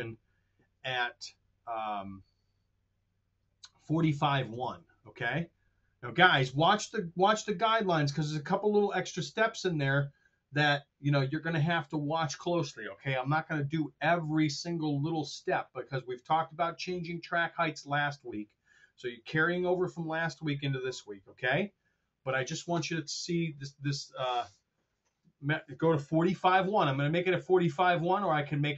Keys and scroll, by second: 4.4 super+Tab.